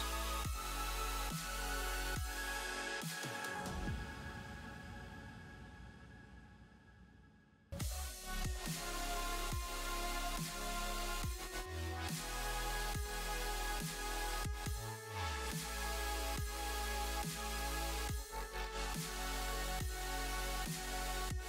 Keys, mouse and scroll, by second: 10.9 space, 11.4 middle click, 11.8 scroll up 1, 13.4 KP_0, 16.6 space, 18.7 click.